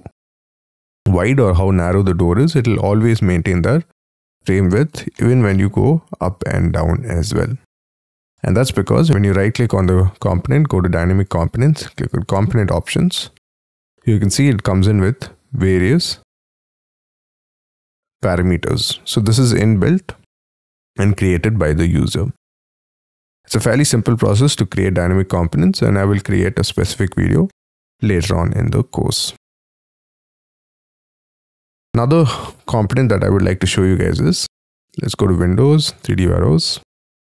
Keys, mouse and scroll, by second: 5.1 middle click, 7.8 middle click, 8.6 right click, 9.2 right click, 24.3 middle click, 30.8 double click, 31.3 middle click, 33.1 Delete, 36.2 F3.